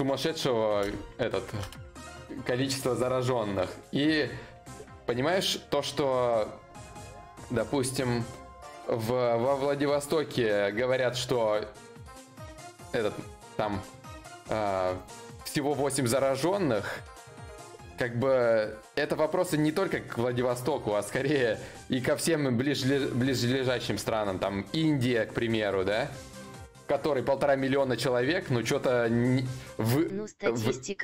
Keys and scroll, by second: 0.5 ctrl+shift+q.